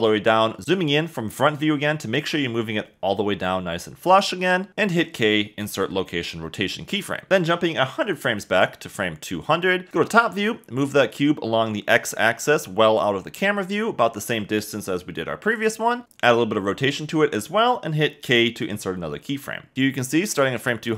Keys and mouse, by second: 1.4 KP_1, 2.8 g, 2.8 z, 4.2 click, 4.7 KP_0, 5.7 k, 7.3 KP_7, 12.9 g, 14.5 x, 16.4 r, 16.4 1, 17.0 8, 17.3 0, 17.5 click, 18.8 k, 19.6 space.